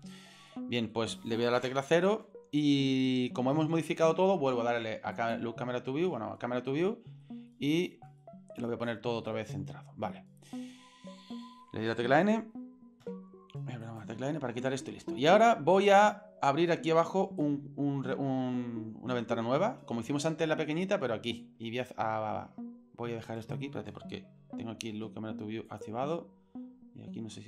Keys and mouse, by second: 0.5 middle click, 1.5 KP_0, 5.1 click, 6.9-7.2 shift+middle drag, 7.5-7.9 ctrl+middle drag, 8.2 middle click, 8.9 ctrl+middle click, 9.4 shift+middle click, 10.1 middle click, 10.7 shift+middle click, 13.0 m, 13.8 right click, 14.2 n, 17.4 click, 24.9 n, 25.7 click, 26.0 n.